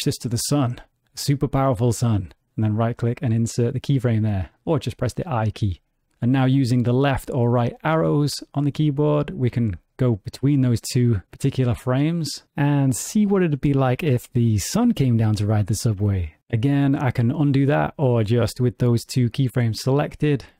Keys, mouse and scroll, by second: 2.6 right click, 6.1 Right, 6.1 Left, 7.3 Right, 8.0 Left, 8.9 Right, 9.5 Left, 10.3 Right, 10.9 Left, 11.4 Right, 12.5 Left, 13.1 Right, 13.7 Left, 19.8 click.